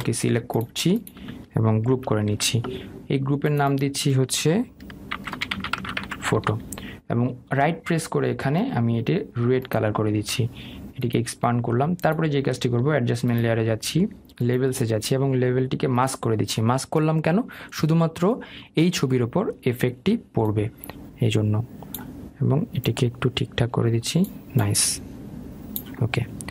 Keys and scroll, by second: 2.5 ctrl+g, 7.0 Return.